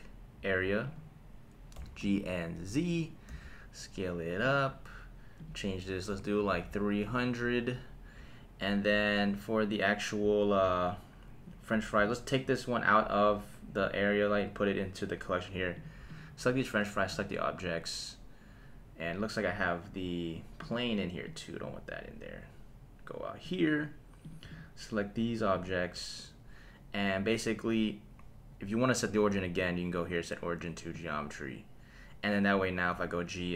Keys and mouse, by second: 1.7 g, 2.0 z, 3.0 click, 3.3 s, 4.4 click, 5.4-7.1 drag, 6.6 KP_0, 12.0 click, 12.7 click, 15.7 click, 16.1-17.2 right drag, 17.2-18.7 drag, 20.6 click, 21.4 click, 24.2 click, 24.5-25.7 right drag, 29.6-31.1 drag, 32.9 g.